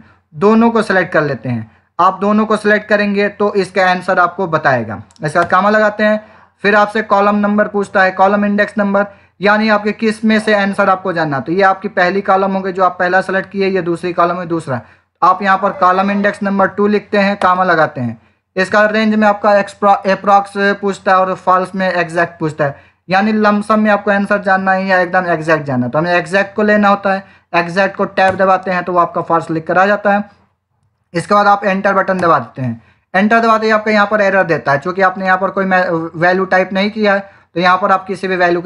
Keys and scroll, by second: 5.3 ,, 15.6 2, 17.3 /, 21.0 Down, 23.1 Up, 24.5 Down, 32.1 Return.